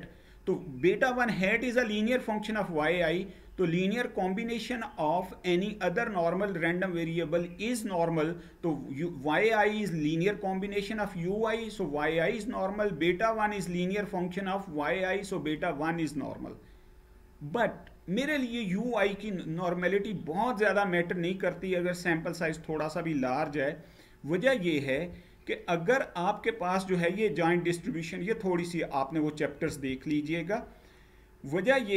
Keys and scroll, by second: 24.6 Down, 29.3 Down.